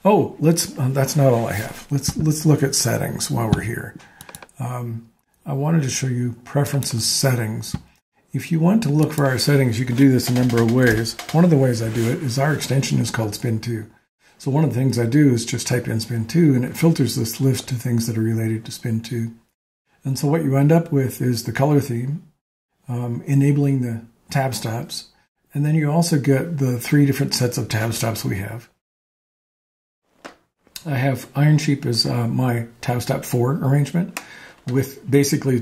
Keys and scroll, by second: 10.1-11.8 typing.